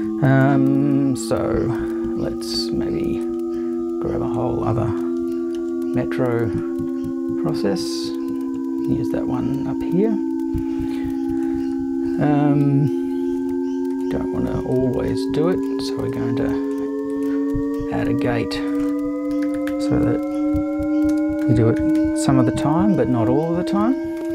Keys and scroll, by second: 5.2 super+c, 5.6 super+v, 17.6 super+1, 19.1-22.5 typing.